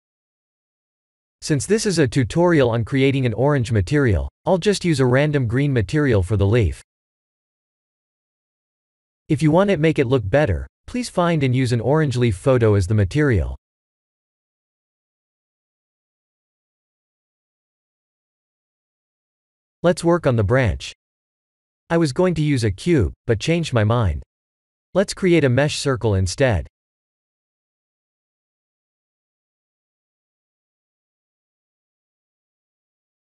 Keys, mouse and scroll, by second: 0.0 Tab, 0.4 click, 2.6 click, 3.7 click, 4.8 drag, 10.2 click, 10.8 click, 11.6 click, 13.2-14.2 scroll down 1, 14.2-14.5 scroll down 2, 14.5-16.8 drag, 17.2 click, 18.3 click, 19.3 click, 19.5 h, 20.0 click, 20.2 shift+a, 24.1 KP_1, 24.6-25.7 scroll down 4, 25.7 g, 28.3-31.9 drag, 32.7 s.